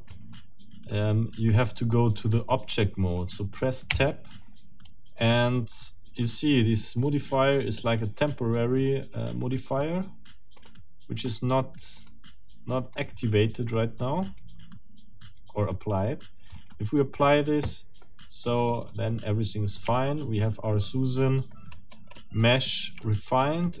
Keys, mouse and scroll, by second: 0.1 click, 3.9 Tab, 9.7 click, 10.6 click, 12.0 click, 13.0 click, 16.6 click, 18.0 middle click, 18.6 scroll up 2, 18.8 click, 19.2 middle click, 19.8 Tab, 20.8 middle click, 21.7-22.3 scroll up 1, 22.6 middle click, 23.4-23.8 middle drag.